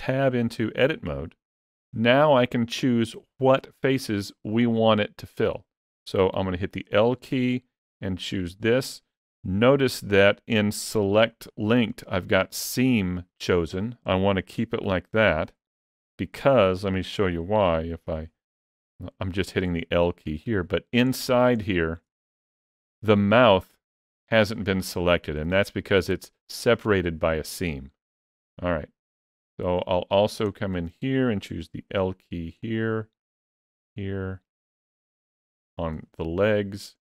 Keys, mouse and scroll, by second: 0.9 Tab, 6.2 l, 8.3 middle click, 9.7 click, 14.7 l, 15.5 middle click, 18.0 l, 19.1 middle click, 20.1 scroll up 3, 20.3 shift+middle click, 21.0 middle click, 21.5 shift+middle click, 22.0 scroll up 1, 22.4 middle click, 22.7 ctrl+middle click, 27.7-28.5 scroll down 2, 28.5 middle click, 28.5 scroll down 3, 29.3 shift+middle click, 30.0 scroll up 2, 30.4 shift+middle click, 31.8 l, 32.5 middle click, 33.4 l, 34.5 l, 35.3 l, 36.0 middle click, 36.9-37.0 scroll up 2.